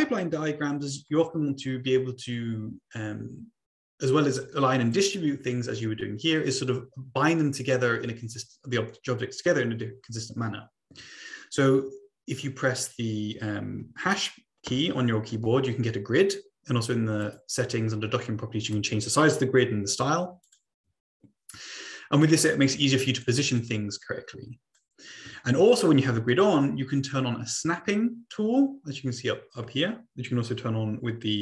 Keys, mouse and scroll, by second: 4.9 click, 9.0 click, 10.0 click, 10.9 Delete, 15.1 #, 17.2 click, 20.4-20.7 drag, 22.2-23.2 drag, 23.6-24.8 drag, 25.2 click.